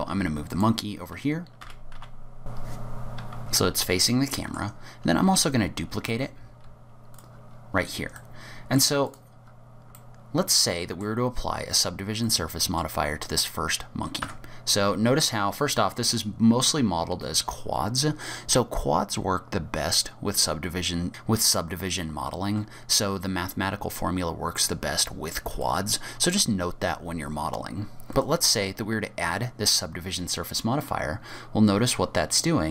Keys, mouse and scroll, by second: 1.6 r, 3.4 scroll down 3, 3.5-4.8 scroll up 5, 4.1 middle click, 4.8-5.3 scroll down 2, 5.3 shift+d, 7.5-7.8 scroll down 3, 7.8-8.3 scroll up 3, 8.2 middle click, 9.1 click, 9.4 scroll up 4, 10.0 middle click, 11.7-12.1 scroll down 3, 12.3 middle click, 14.3 Tab, 22.5 Tab, 25.7 middle click, 28.2 click, 30.9-31.2 scroll up 4, 31.5 scroll down 1, 31.7 middle click.